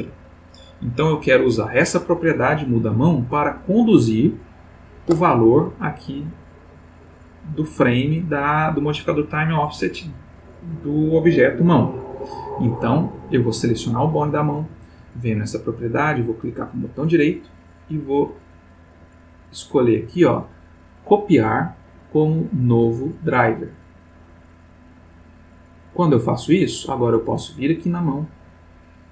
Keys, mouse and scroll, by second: 4.3 click, 13.3 click, 17.0 right click, 25.2 click, 27.7 click.